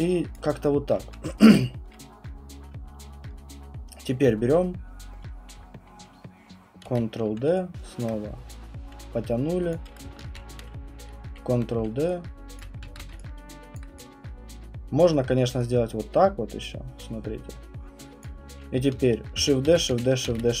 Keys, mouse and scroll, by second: 0.3 click, 6.8 ctrl+d, 7.5-8.0 typing, 8.0 click, 9.7 click, 10.2 shift+d, 12.0-13.0 typing, 12.6 click, 13.8 alt+click, 15.0 alt+click, 18.2 click, 19.4-20.6 typing.